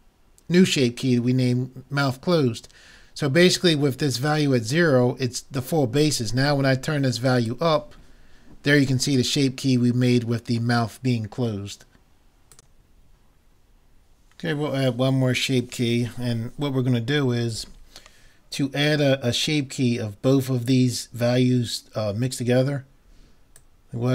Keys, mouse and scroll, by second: 7.5-9.3 drag, 9.2 middle click, 23.6-24.1 drag.